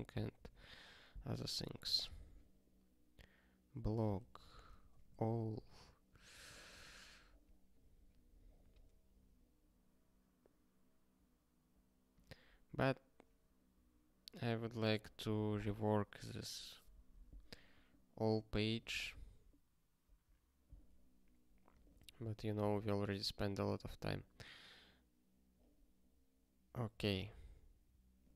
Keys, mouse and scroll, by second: 0.6 ctrl+s, 3.7 click, 4.1 ctrl+f, 4.5 alt+d, 4.5-5.4 typing, 5.5 ctrl+s, 6.3 ctrl+n, 6.4 ctrl+n, 7.3 ctrl+s, 12.1 click, 18.5 scroll up 1, 20.0 scroll down 1, 21.7 click, 22.9 ctrl+k, 28.2 click.